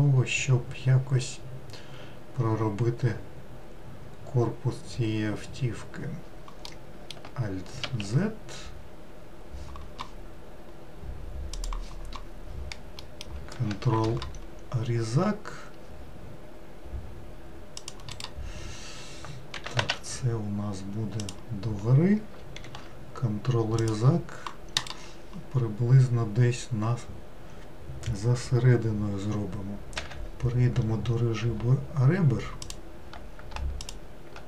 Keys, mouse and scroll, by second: 6.7-7.8 middle drag, 7.8 alt+z, 13.1 middle click, 14.0 ctrl+r, 19.6 g, 22.7 ctrl+r, 30.9-31.6 scroll up 1, 31.6 scroll up 1, 32.7 click, 33.8 shift+click.